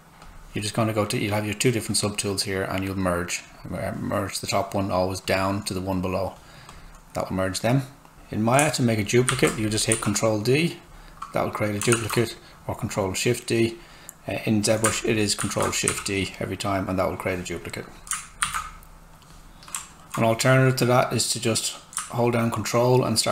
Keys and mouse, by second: 3.4 click, 8.1 Tab, 9.3 ctrl+d, 9.9 w, 10.7 click, 12.1 alt+Tab, 14.9 ctrl+shift+Tab, 15.4 ctrl+shift+d, 15.9 w, 17.2 click, 18.4 ctrl+shift+d, 19.1 click, 19.8 alt+right click, 22.2 ctrl+click.